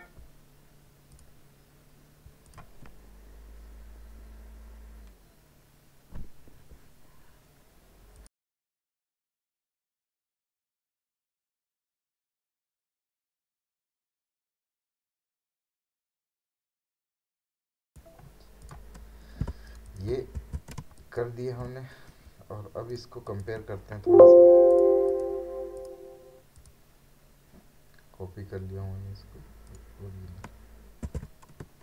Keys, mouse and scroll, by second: 1.1 click, 8.1 click, 17.8 click, 19.5 space, 19.7 right click, 19.9 click, 20.4 v, 21.0 ctrl+space, 21.2 ctrl+click, 21.6 ctrl+space, 22.3 space, 22.9 right click, 23.4 space, 24.7 click, 28.8-29.7 scroll up 1, 29.7 click, 31.1 ctrl+v.